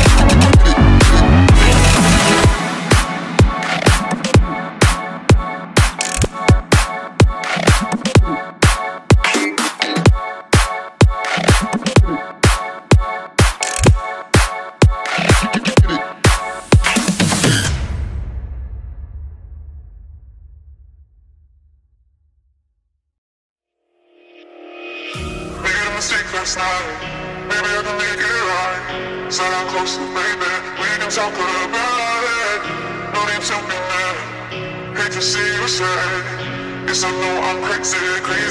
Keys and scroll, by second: 0.9 ], 18.2 [.